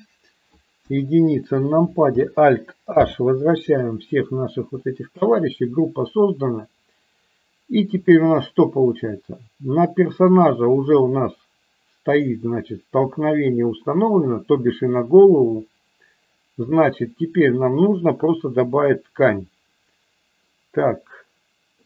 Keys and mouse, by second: 0.7 KP_1, 2.9 alt+h, 4.7 middle click, 10.1 click, 17.2 click, 18.6 click.